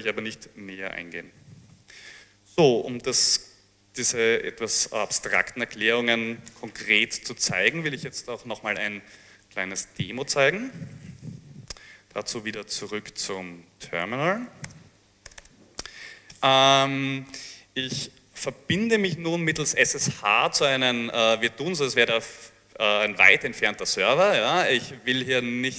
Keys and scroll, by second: 1.5 Page_Down, 11.8 alt+Tab, 13.9-15.0 typing, 15.4 Return, 15.5 Return.